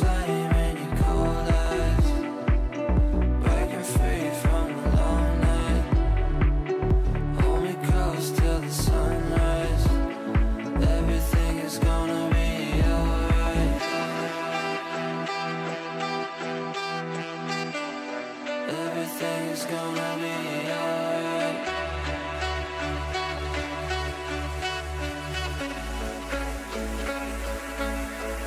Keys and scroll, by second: 0.9 g, 27.8 Delete.